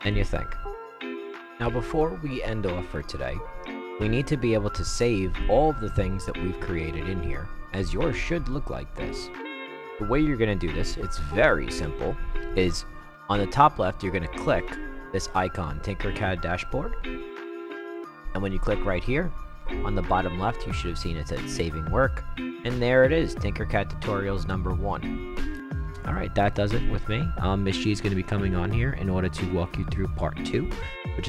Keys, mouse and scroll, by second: 0.1 click, 17.2 click.